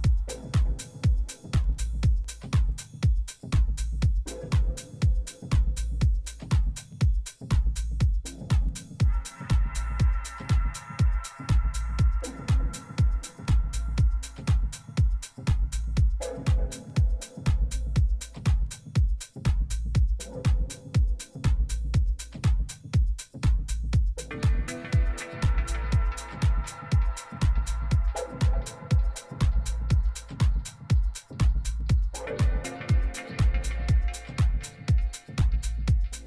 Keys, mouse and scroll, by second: 6.5-8.2 middle drag, 14.2 Tab, 15.6 a, 17.0-18.6 right drag, 17.7 click, 18.2-20.0 middle drag, 20.0-21.1 drag, 21.0 Delete, 21.2 middle click, 22.3-24.1 middle drag, 25.3-27.0 drag, 26.4 right click, 26.9 middle click, 29.1 ctrl+f, 32.8 t, 33.5 t, 34.7 a, 35.7 middle click.